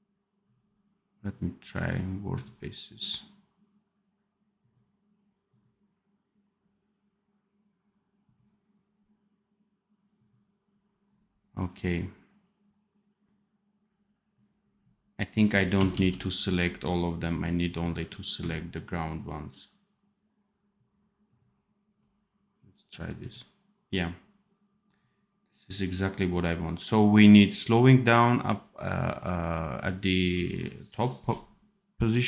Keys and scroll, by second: 15.8 ctrl+z.